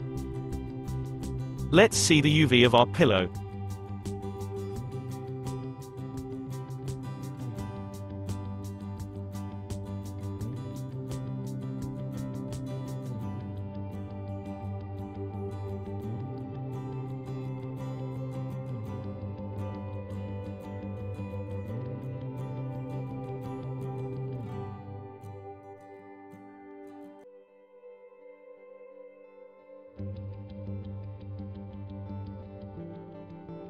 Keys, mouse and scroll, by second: 3.5 click, 4.4-5.0 scroll up 7, 5.1-5.6 middle drag, 5.6 scroll up 2, 6.1 Tab, 11.2-20.7 middle drag, 20.7-21.4 scroll up 5, 21.4 middle click, 22.3-23.5 scroll up 3, 22.4 middle click, 23.5-24.0 scroll down 1, 24.1-25.1 middle drag, 25.1 click, 27.9-33.6 middle drag.